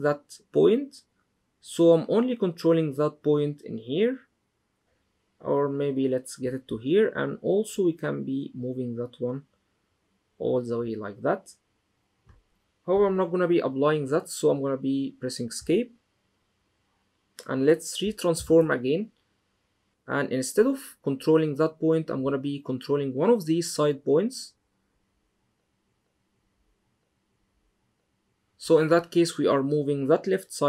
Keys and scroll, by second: 15.3 Escape, 18.1 super+t.